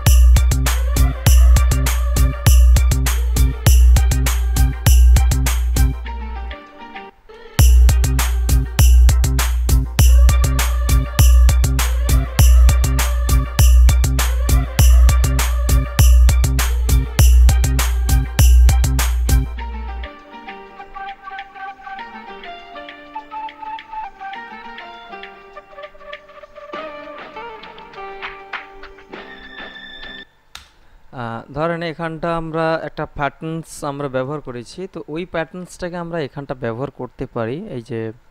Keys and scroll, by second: 7.2 space, 30.4 space.